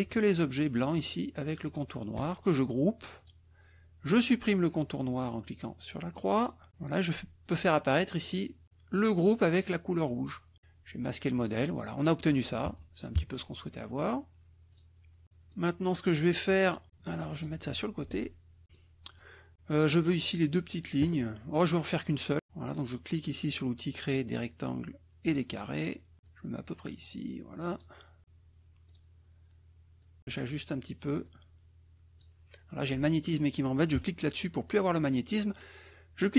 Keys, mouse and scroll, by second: 0.2 shift+click, 0.9 shift+click, 1.6 shift+click, 3.1 click, 6.1 click, 10.2 click, 11.3 click, 11.9 click, 12.7 KP_Subtract, 13.2 KP_Add, 14.7 click, 15.2 middle click, 16.5 middle click, 16.9-17.6 drag, 17.9-18.6 ctrl+drag, 18.7 ctrl+middle click, 18.7 ctrl+click, 25.2 click, 26.2-27.9 drag, 28.9 click, 29.9 click, 31.2-32.3 drag, 33.9 click.